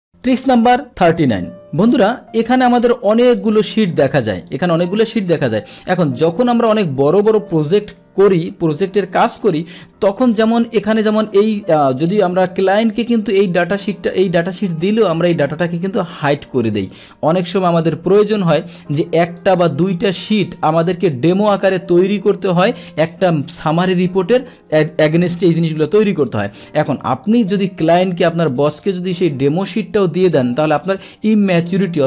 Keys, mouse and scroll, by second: 0.2 alt+Tab, 2.7 click, 3.4 click, 3.8 click, 4.4 click, 5.0 click, 6.7 click, 7.5 click, 10.1 click, 11.2-13.3 drag, 15.1-16.1 right drag, 16.3 click, 17.4-18.4 drag, 19.4 click, 20.4 click, 23.0 click, 27.3 click, 28.6 shift+click, 30.4 click, 31.5 click.